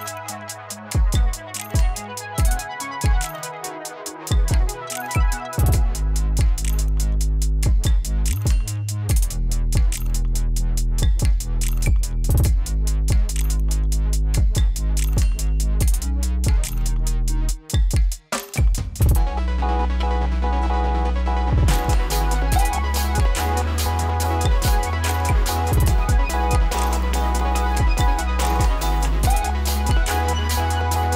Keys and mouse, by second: 2.9 space, 4.1 click, 7.4 space, 9.1-14.6 drag, 17.1 ctrl+alt+Home, 18.7 click, 22.1-22.8 typing, 23.4 click, 24.5 typing, 25.6 click, 27.3 space, 29.8 space, 31.0-31.1 drag.